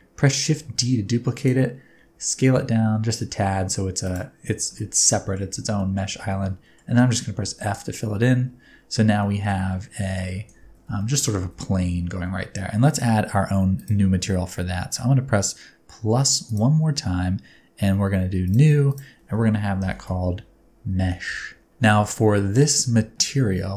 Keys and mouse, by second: 0.4 shift+d, 1.3 click, 1.9 s, 4.0 click, 4.5 alt+z, 4.8 middle click, 5.5 alt+z, 5.8 middle click, 6.1 alt+z, 6.3 middle click, 7.4 f, 8.5 Tab, 9.2 middle drag, 10.0 alt+z, 10.5 alt+z, 10.9 shift+middle click, 11.3 alt+z, 11.5-12.0 middle drag, 12.2 alt+z, 18.5 middle click, 19.0-21.7 middle drag, 23.2 Tab.